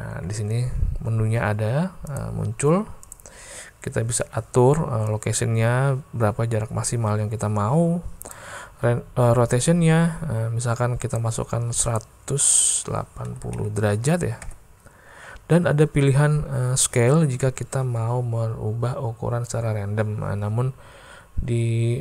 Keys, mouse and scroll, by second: 2.1 click, 3.1 click, 5.1-8.4 drag, 9.7-11.3 drag, 11.9-15.3 drag.